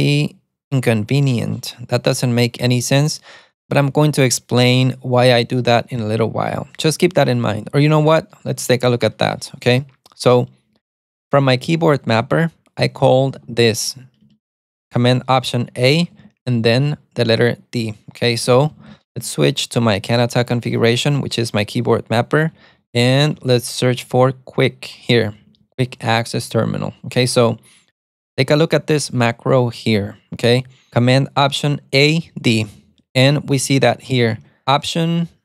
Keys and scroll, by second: 2.1-3.4 typing, 5.9-9.6 typing, 12.1-14.7 typing, 16.2 typing, 18.4-19.7 typing, 20.5 Return, 22.3-23.9 typing, 24.1 Return, 25.3-26.8 typing, 32.7-34.4 typing.